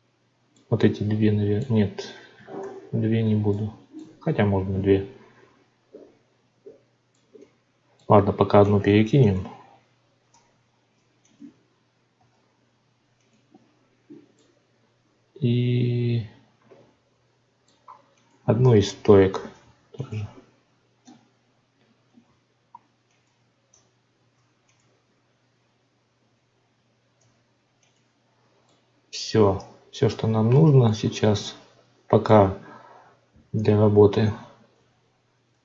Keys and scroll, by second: 2.6 ctrl+z, 10.2 Tab, 18.8 Tab, 23.6 Tab.